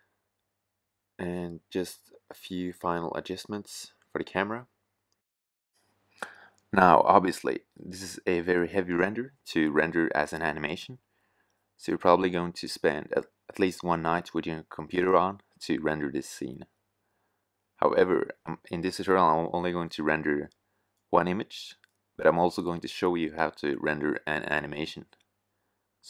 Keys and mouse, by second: 4.1 Tab, 5.8 Tab, 6.7-8.2 drag, 7.5 shift+f, 19.7-20.4 middle drag.